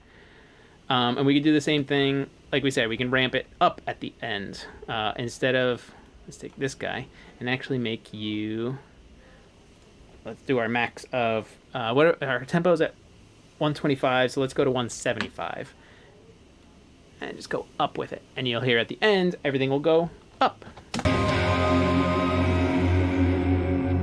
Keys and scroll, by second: 1.1-1.8 typing, 14.2-15.4 typing, 17.7 typing, 20.7 shift+super+s.